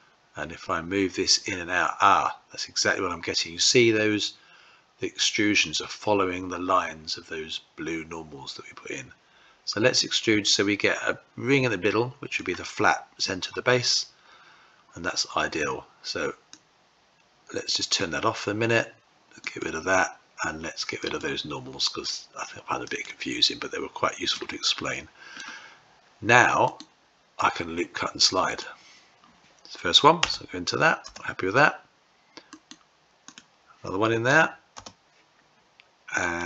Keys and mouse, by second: 12.2 typing, 16.3-17.8 drag, 19.3 click, 20.9-23.3 drag, 24.1-25.2 middle drag, 26.4-31.8 right drag, 32.5-34.6 right drag, 36.1 click.